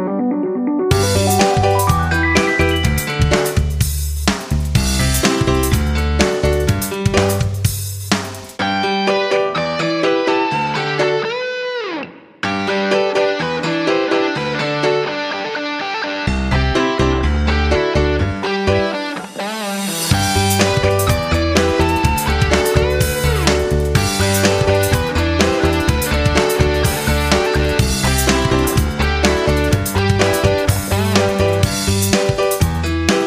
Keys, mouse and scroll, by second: 20.2 F9, 21.9-32.9 drag.